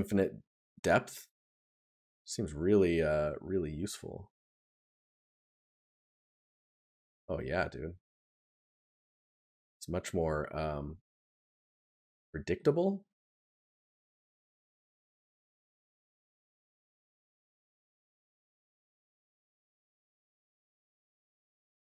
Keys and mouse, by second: 8.7 right click, 12.2 right click, 14.7 right click, 18.2 right click.